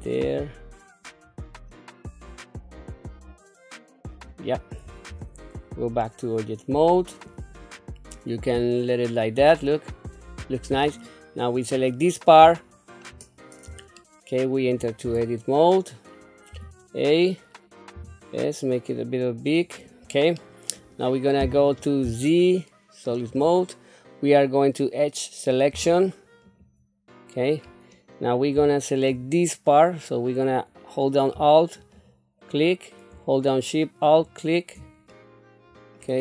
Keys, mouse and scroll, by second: 5.1 Tab, 5.6 scroll down 1, 6.0 middle click, 7.7-10.8 middle drag, 11.5 click, 12.5 shift+middle click, 13.3 scroll up 2, 13.9 shift+middle click, 15.0 Tab, 16.5 a, 18.0 s, 20.3 middle click, 22.0 z, 25.7 2, 26.5 click, 27.6 scroll up 2, 28.2 scroll down 1, 28.7 shift+middle click, 31.8 alt+click, 34.0 alt+shift+click, 35.1 middle click.